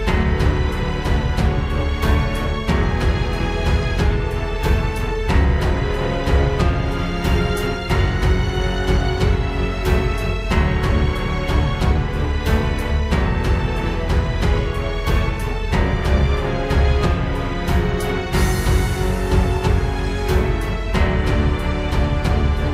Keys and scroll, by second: 2.4 ctrl+space, 3.0 ctrl+z, 4.5 ctrl+z, 5.8 ctrl+j, 6.1 ctrl+t, 6.9 ctrl+t, 7.1 ctrl+z, 10.5 ctrl+z, 10.6 ctrl+space, 10.7 ctrl+z, 11.6 ctrl+z, 12.4 ctrl+z, 12.8 ctrl+z, 13.4 ctrl+j, 13.7 ctrl+t, 13.9 ctrl+z, 19.7 ctrl+space, 22.1 ctrl+space.